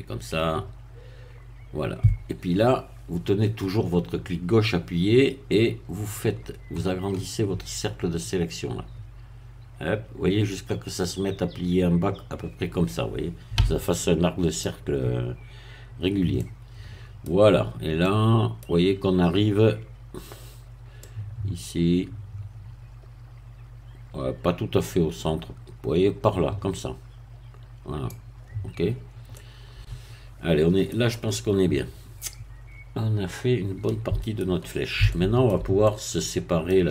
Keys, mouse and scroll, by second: 5.2-6.1 scroll up 2, 6.4-7.8 scroll down 3, 8.0-9.1 scroll down 2, 9.5-9.8 scroll down 1, 11.2 scroll up 1, 16.4-17.6 middle drag, 17.6 scroll up 1, 18.0 middle click, 19.0-19.8 scroll up 1, 21.0-28.4 drag, 28.8 scroll down 1, 29.4-35.0 middle drag, 35.0-36.9 shift+middle drag.